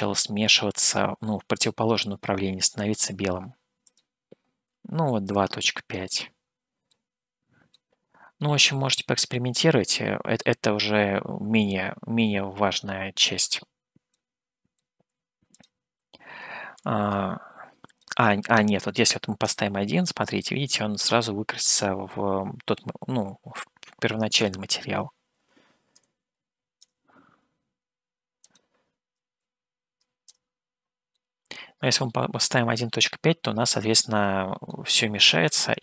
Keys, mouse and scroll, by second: 3.9-5.9 drag, 6.3-11.4 middle drag, 14.4 middle click, 15.6-27.4 drag, 28.4-30.8 drag, 31.3-33.7 middle drag, 34.7-35.7 middle drag.